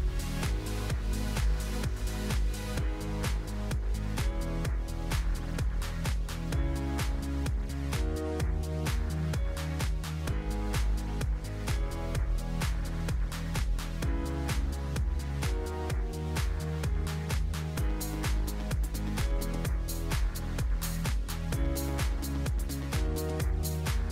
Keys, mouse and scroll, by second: 0.5 drag, 1.3 click, 1.6-2.6 scroll up 4, 2.6 s, 3.3 g, 6.2 click, 6.9 click, 8.6 click, 9.8 click, 10.1-11.1 scroll down 8, 11.2-13.7 drag, 14.0 click, 14.2-15.3 right drag, 15.3 click, 16.1 click, 18.1 shift+d, 19.9 click, 20.2 scroll up 1, 20.5 scroll down 3, 21.1 g, 22.6 s, 23.7 click.